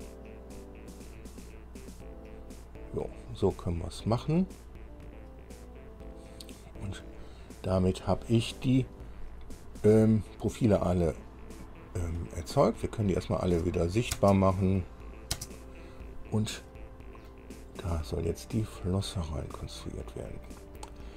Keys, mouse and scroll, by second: 1.3-1.7 scroll down 1, 4.1 scroll down 2, 5.8-8.9 drag, 11.4 click, 12.6 click, 14.0 shift+click, 14.3 shift+space, 15.0 shift+click, 15.5 space, 16.9 click, 18.4-20.8 drag, 21.0-21.1 drag.